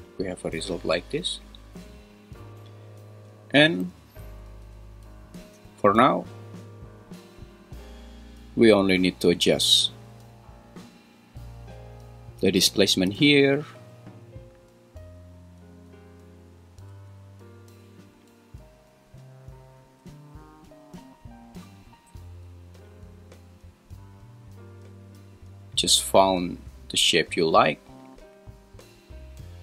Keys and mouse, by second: 3.8 g, 4.2 z, 11.3 click, 13.0-16.9 shift+drag, 18.3-19.9 shift+drag, 22.9-29.6 shift+drag.